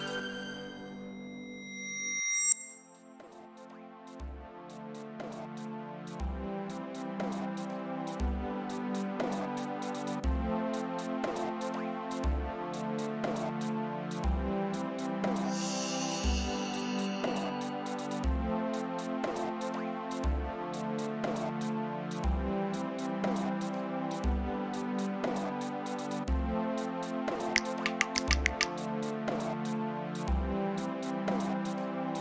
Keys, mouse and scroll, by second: 3.4 click, 10.9 click, 14.0 click, 16.8 click, 19.6 click, 21.0 click, 25.5 click, 29.9 click.